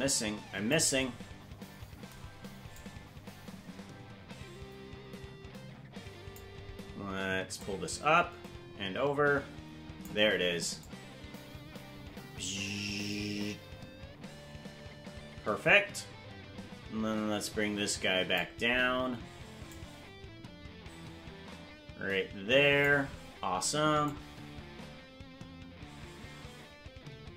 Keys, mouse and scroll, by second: 2.8-6.4 drag, 7.6-10.1 drag, 10.9-18.4 drag, 19.7-22.9 drag, 24.1-27.3 drag.